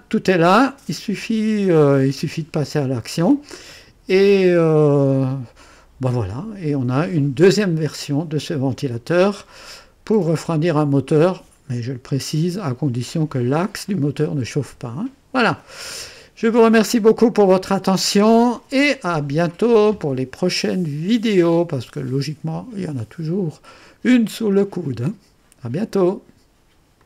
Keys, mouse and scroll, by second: 3.7-4.7 right drag, 17.5 right click, 27.0 click.